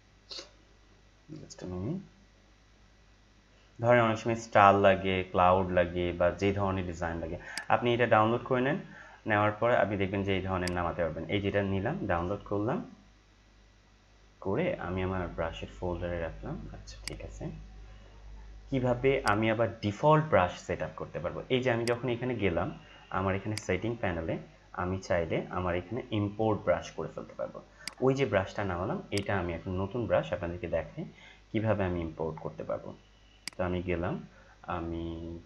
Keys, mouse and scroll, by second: 0.9-2.7 scroll down 1, 2.7 scroll down 1, 3.7-5.2 scroll up 1, 7.5 click, 10.6 click, 17.0 click, 19.3 click, 21.8 click, 27.8 click, 33.4 click.